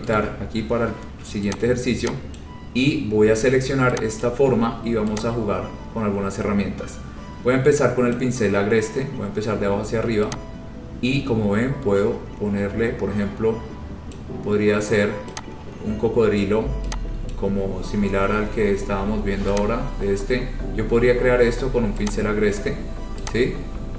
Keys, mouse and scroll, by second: 0.3 right click, 1.8 click, 2.5 click, 2.8 scroll, 4.4 click, 6.5-7.5 scroll, 8.2 click, 14.3 click, 16.5 click, 17.5 click, 19.7 click, 20.4 scroll, 22.2 click.